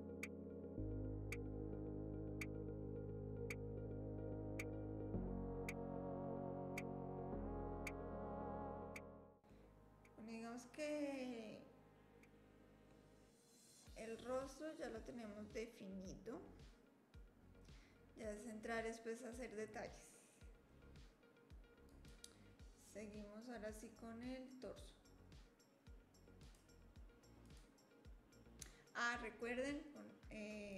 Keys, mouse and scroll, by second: 21.9 click, 26.4 click, 27.4 click.